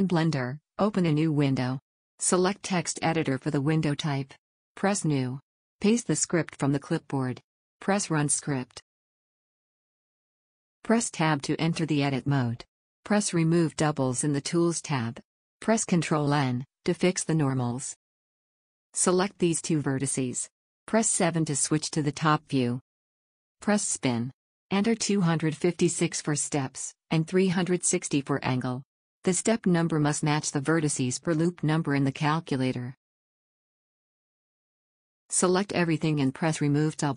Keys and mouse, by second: 1.2-7.6 drag, 5.8 ctrl+v, 11.2 Tab, 16.2 ctrl+n, 22.1 KP_7, 29.0-31.2 middle drag, 32.0-35.5 middle drag, 35.5 a, 35.8 a.